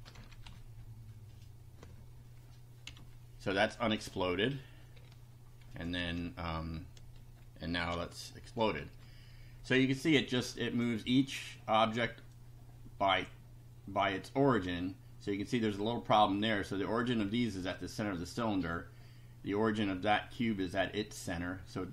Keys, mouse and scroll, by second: 0.2 shift+End, 0.5 shift+Delete, 2.8 F5, 5.6 ctrl+z, 7.9 F5, 10.8 click, 12.3-13.4 drag, 20.2 middle click.